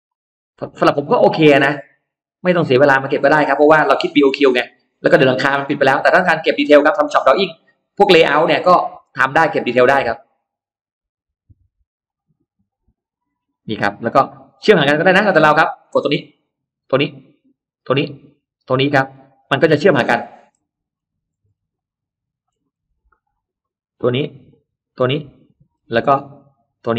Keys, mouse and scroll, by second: 0.4 click, 0.8 middle click, 1.0-1.4 scroll down 1, 1.5 scroll up 1, 2.3 click, 3.0 click, 3.8 click, 4.5 click, 4.8-5.1 scroll down 2, 5.4-6.0 scroll up 2, 6.2 click, 7.0 click, 8.0 click, 8.8 click, 9.1 middle click, 9.6 middle click, 10.0 click, 10.9 click, 11.9 click, 13.0 click, 13.6 middle click, 13.8-14.2 scroll down 1, 14.2-14.5 scroll up 1, 15.6 click, 16.6 click, 17.5 click, 18.2 click, 18.8-20.6 scroll down 3, 19.6 middle click, 20.0 middle click, 20.5 middle click, 21.0-21.8 scroll up 2, 21.6 middle click, 22.5-23.2 scroll up 1, 24.0 click, 24.7 click, 25.0 middle click, 25.6 scroll down 1, 26.5 click.